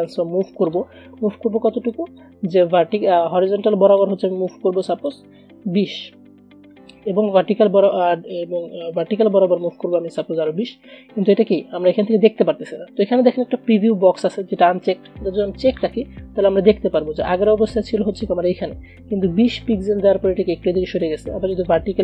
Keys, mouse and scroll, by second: 15.8 click, 21.8 click.